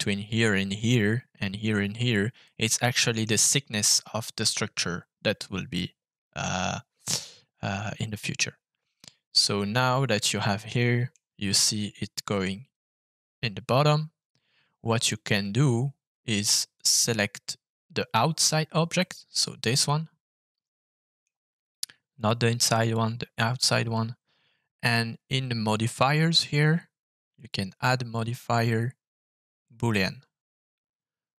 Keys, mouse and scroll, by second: 2.4 middle click, 5.7-11.1 middle drag, 16.7 click, 18.9-21.2 middle drag, 22.1 click, 22.7 click, 27.3-29.9 drag, 31.3-31.4 drag.